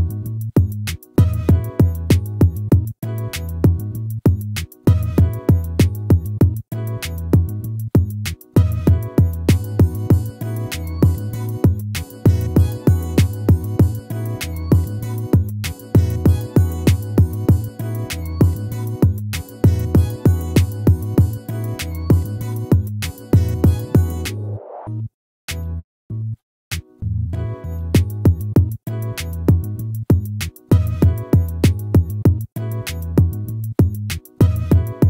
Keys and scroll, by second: 19.6 ctrl++, 34.5 ctrl+z.